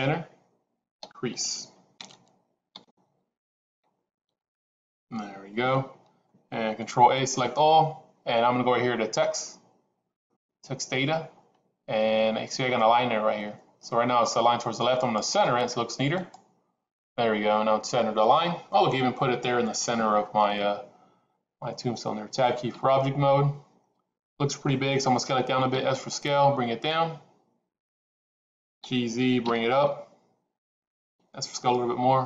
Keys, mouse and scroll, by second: 0.9-4.3 typing, 6.9 ctrl+a, 10.2 click, 14.9-16.3 drag, 22.7 Tab, 25.6 s, 28.7 g, 31.0 s.